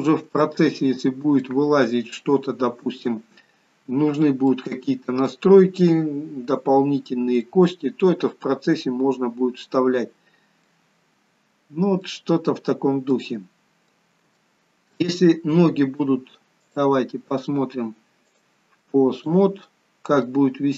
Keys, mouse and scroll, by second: 0.5 middle click, 4.0 scroll up 2, 4.6 middle click, 7.6 middle click, 8.7-9.2 scroll down 1, 9.7 middle click, 12.2 middle click, 14.5 middle click, 14.8 shift+middle click, 15.3 middle click, 16.8 click, 18.4 click, 19.7 middle click.